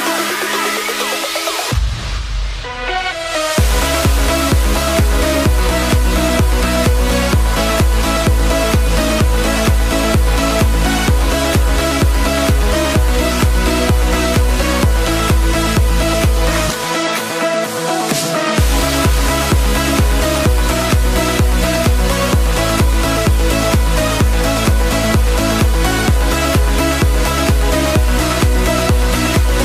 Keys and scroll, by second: 0.4 ], 8.4 ctrl+t.